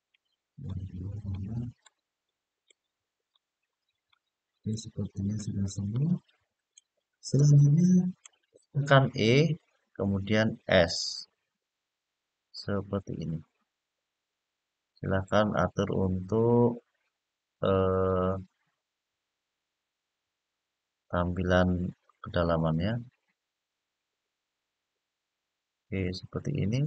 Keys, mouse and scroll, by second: 0.4-1.0 middle drag, 1.6-2.4 middle drag, 3.1-3.8 middle drag, 4.4-5.2 middle drag, 5.7-6.5 middle drag, 7.1-7.9 middle drag, 9.5 e, 10.9-26.8 s.